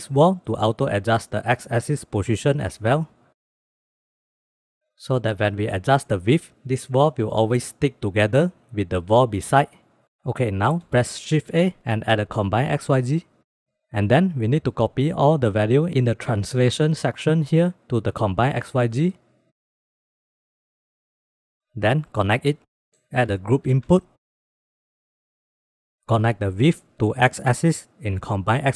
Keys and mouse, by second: 4.6 ctrl+z, 6.1 click, 6.3 click, 6.6 click, 7.0 click, 8.4 ctrl+s, 11.1 shift+a, 19.6-21.6 drag, 21.9-22.6 drag, 22.9 middle click, 23.9 shift+a, 27.0-27.9 drag.